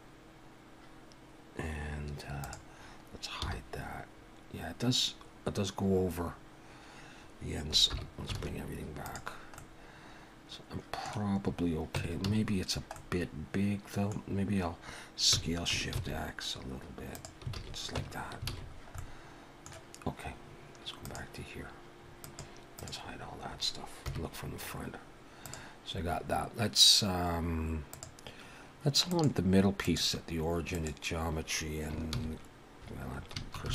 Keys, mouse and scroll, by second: 2.4 click, 3.4 h, 7.9 alt+h, 8.4 alt+a, 9.0 click, 9.6 middle click, 12.0 Tab, 12.2 a, 13.0 middle click, 17.5 alt+a, 18.0 Tab, 18.5 alt+a, 18.7-19.0 scroll down 3, 19.0 middle click, 21.1 click, 22.2 click, 24.1 KP_1, 24.8 scroll up 2, 25.4 click, 27.9 click, 32.1 shift+c, 33.1 scroll up 2.